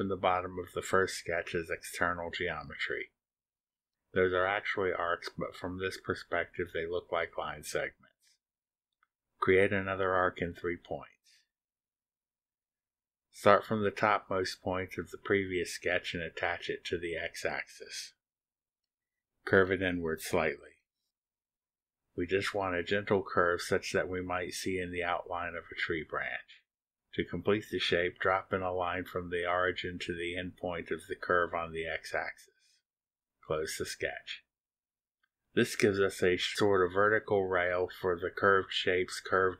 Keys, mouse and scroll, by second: 5.0 click, 9.5 click, 11.7 click, 15.3 click, 17.7 click, 25.1 click, 27.5 click, 29.8 click, 31.9 click, 33.1 click, 35.0 click.